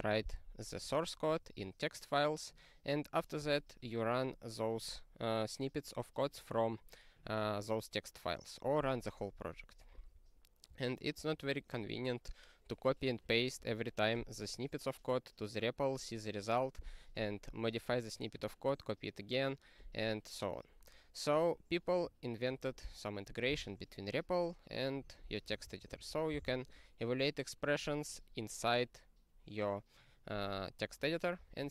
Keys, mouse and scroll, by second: 11.1 ctrl+q, 13.1 click, 13.2 click, 21.4 click, 25.6 ctrl+p, 25.9 ctrl+e, 26.4 ctrl+e.